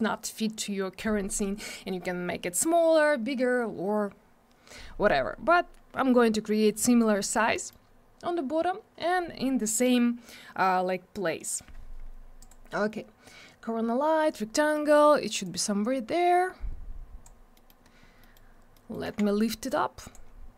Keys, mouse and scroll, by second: 7.5 middle click, 12.4 click, 14.5 middle click, 15.4 click, 17.5 middle click, 17.8-18.2 scroll down 1, 18.2 middle click, 18.5 scroll down 1, 18.7 middle click, 19.0 w, 19.6 click, 20.2 scroll up 1.